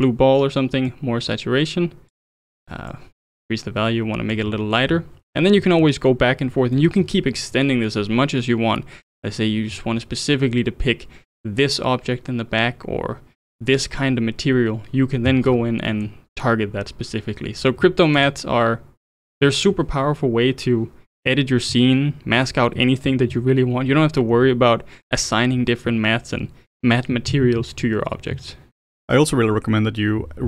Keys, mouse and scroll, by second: 0.9-4.9 drag, 4.9-5.3 scroll down 7, 5.6-7.0 middle drag, 7.0 scroll down 2, 15.5 scroll up 5, 15.9-18.2 middle drag, 18.2 ctrl+shift+click, 19.0 ctrl+shift+click, 19.3 ctrl+shift+click.